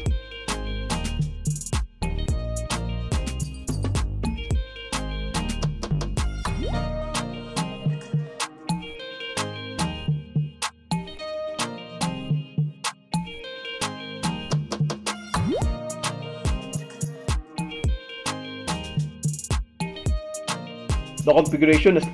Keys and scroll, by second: 4.1 ctrl+w, 5.6 super+e, 10.8 Escape, 15.9 Escape.